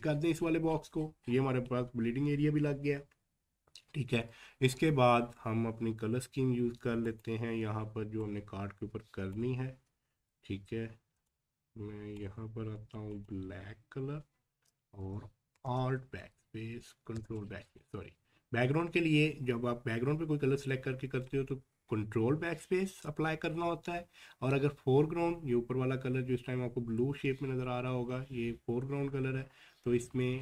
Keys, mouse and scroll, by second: 1.7 scroll up 1.